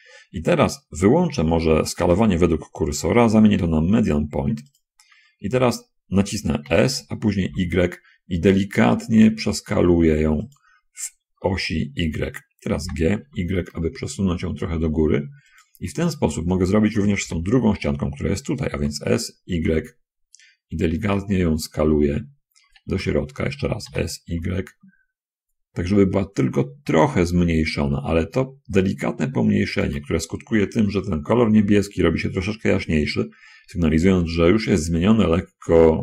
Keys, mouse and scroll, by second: 2.5 click, 5.0 click, 7.0 s, 7.6 y, 10.7 click, 13.1 g, 13.2 y, 15.8 shift+click, 17.6 l, 19.1 s, 20.0 y, 23.1 shift+Escape, 23.8 s, 24.6 y, 29.7 shift+click, 30.6 shift+middle click.